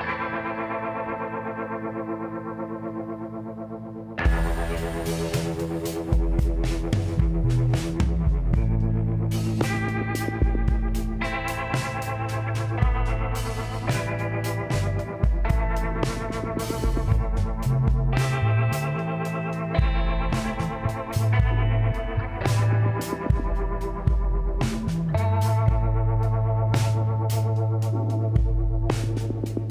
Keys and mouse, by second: 0.5-2.3 drag, 2.7-3.9 middle drag, 3.9 click, 3.9 KP_Decimal, 4.7 middle click, 6.6 middle click, 8.7 middle click, 11.8 shift+a, 13.7 s, 17.1 KP_1, 17.8-19.3 middle drag, 19.3 r, 21.6 g, 25.7-29.1 drag, 26.0 z, 26.7 z, 29.6-29.7 drag.